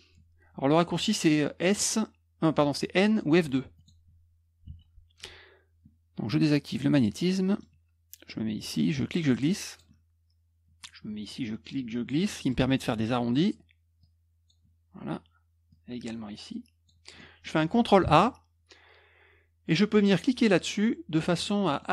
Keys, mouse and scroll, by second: 3.7 click, 4.6 F2, 6.9 click, 7.5 middle click, 9.0 click, 11.3 click, 12.3 middle click, 12.7 middle click, 14.0 click, 15.7-16.8 drag, 17.1 middle click, 18.0 ctrl+a, 21.7 middle click, 21.8 middle click, 21.8 scroll up 1.